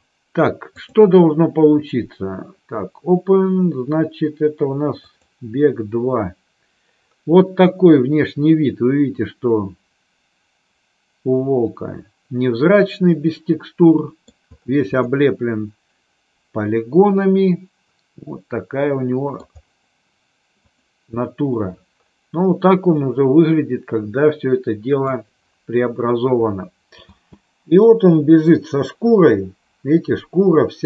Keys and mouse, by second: 1.0-5.5 drag, 8.4-14.4 middle drag, 15.2-19.5 middle drag, 23.2-25.2 middle drag, 27.2 space, 30.3-30.8 middle drag.